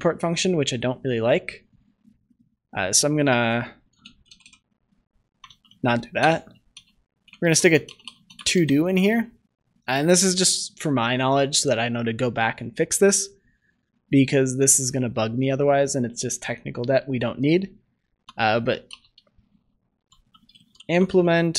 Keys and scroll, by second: 5.4 ctrl+z.